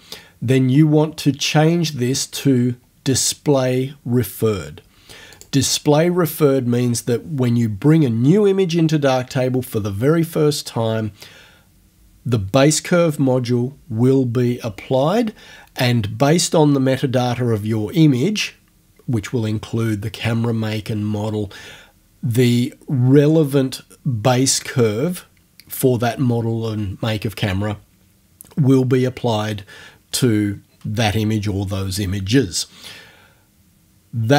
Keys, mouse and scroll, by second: 5.4 click.